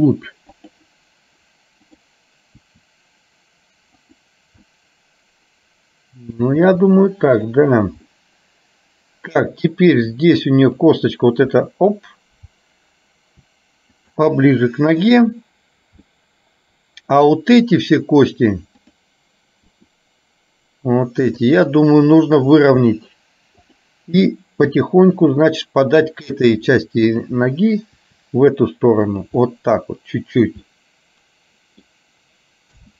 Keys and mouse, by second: 1.9 click, 2.8 r, 4.7-6.4 middle drag, 6.7 r, 8.2-9.4 middle drag, 10.8 click, 11.7 r, 14.4 middle click, 16.2-17.3 middle drag, 18.9 click, 19.8 r, 22.9 middle click, 23.7 click, 24.8 r, 27.2 click, 28.1 r, 29.6 middle click, 30.8-31.9 middle drag.